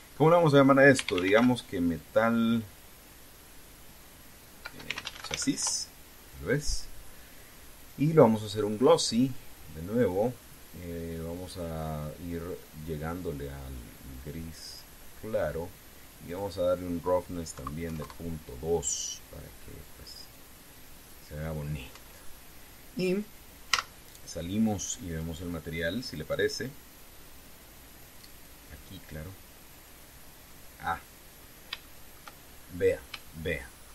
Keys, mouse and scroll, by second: 1.7-2.1 typing, 5.4 space, 5.6 c, 5.8 a, 5.9 s, 6.3 Return, 8.6 click, 10.7 click, 12.1 click, 13.4-15.7 drag, 17.0 click, 18.2 KP_Decimal, 18.6 KP_2, 18.8 KP_Enter, 20.1 scroll down 2, 21.7 click, 22.6 Tab, 24.4 z, 25.8 click, 29.1 click, 30.5 click, 31.3-31.7 scroll down 1, 32.2 scroll down 1, 32.6 shift+middle click, 33.2-33.8 shift+scroll up 3.